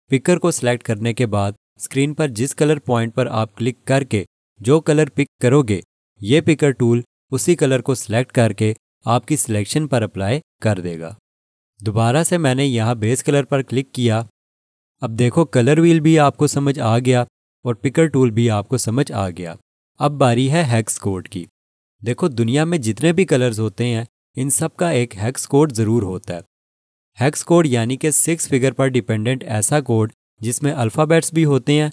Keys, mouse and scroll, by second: 13.7 click.